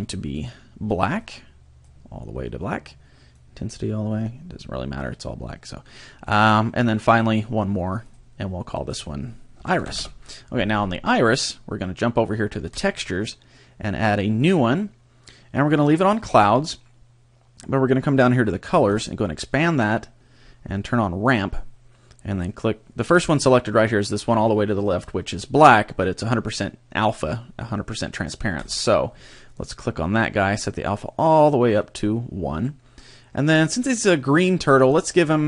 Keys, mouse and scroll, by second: 0.3 click, 3.3 click, 7.1 click, 8.0 click, 8.7 click, 12.7 click, 14.1 click, 18.9 click, 19.5-21.3 scroll down 5, 21.3 click, 28.6 click.